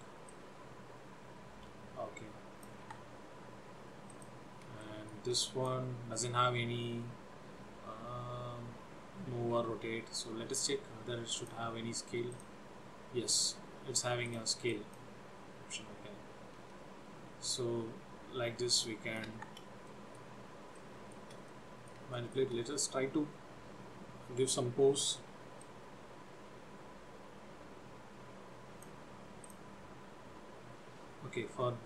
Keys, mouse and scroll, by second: 0.4 click, 3.3 ctrl+z, 4.3 click, 4.9 shift+middle click, 5.6 click, 11.5 click, 14.3 click, 14.8 click, 15.9 click, 18.9 click, 19.9 ctrl+z, 20.0 middle click, 20.9 shift+middle click, 21.7 middle click, 22.3 shift+middle click, 22.7 scroll up 2, 25.8 click, 29.7 click, 31.2-31.8 scroll up 1.